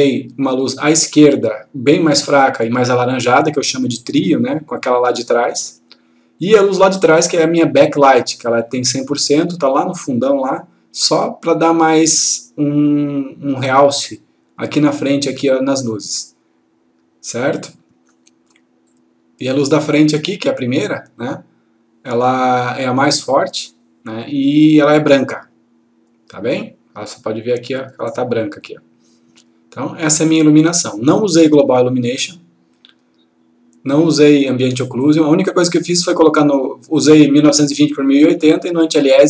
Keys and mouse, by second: 21.2 click, 38.5 click.